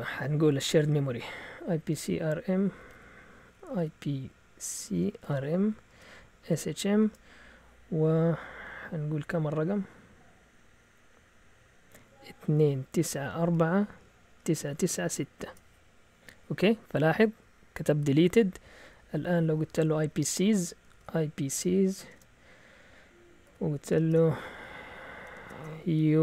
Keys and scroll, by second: 0.7 alt+Tab, 1.3 Up, 1.7 Left, 2.0 Up, 2.5 Down, 2.6 Down, 2.8 Down, 3.0 Down, 3.4-7.5 typing, 12.3-15.5 typing, 18.2 Up, 18.7 Up, 19.1 Up, 19.4 Down, 19.6 Down, 19.7 Down, 19.8 Down, 20.0 Down, 20.1 Down, 20.6-22.1 typing, 23.2-26.2 typing.